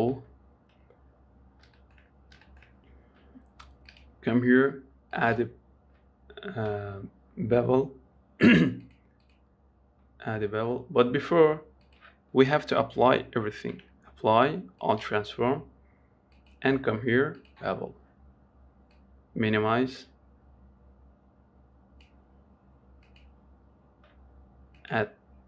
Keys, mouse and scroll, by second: 0.4-1.7 scroll down 2, 1.7 scroll up 2, 2.1 shift+middle click, 2.5 scroll up 1, 2.8-4.2 shift+middle drag, 5.6-7.2 drag, 9.1-13.9 drag, 13.9 ctrl+a, 17.8-22.3 drag, 23.4-25.4 drag.